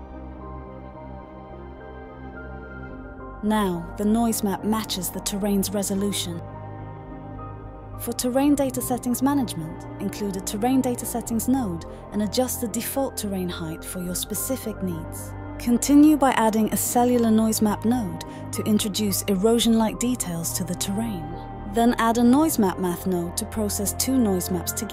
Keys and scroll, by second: 5.3-8.0 typing, 8.0 Return, 12.0-13.0 typing, 14.2 d, 17.6 typing, 20.1-20.8 typing, 22.6-23.6 typing.